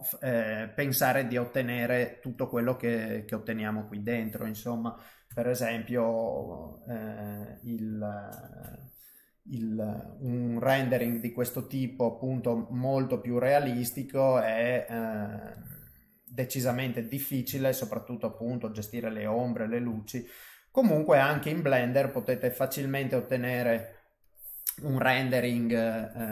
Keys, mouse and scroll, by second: 5.3 click, 5.3 KP_0, 6.5 ctrl+middle click, 8.6 n, 10.2 click, 12.4 click, 13.5 click, 15.4 click, 15.9 middle click, 16.7 shift+middle click, 17.5 ctrl+middle click, 18.3 middle click, 18.8 ctrl+middle click, 19.3 middle click, 20.0 shift+middle click, 20.4 middle click, 21.4 shift+middle click, 24.2 click, 25.9 click.